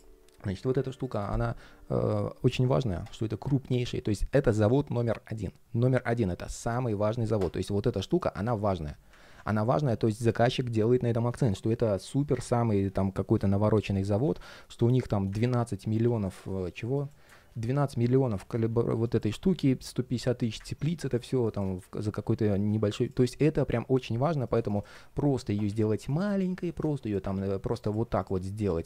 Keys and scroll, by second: 9.0 super+z, 27.1 super+z.